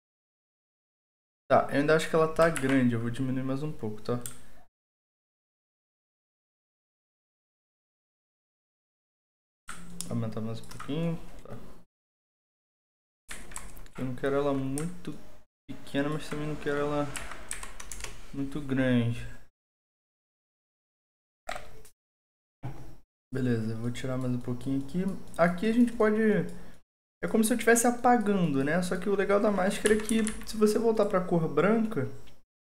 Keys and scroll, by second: 2.5 ctrl+t, 13.3 Down, 13.5 typing, 17.1 Right, 17.5 Down, 17.9 Return, 30.0 ], 30.0 ], 30.2 ].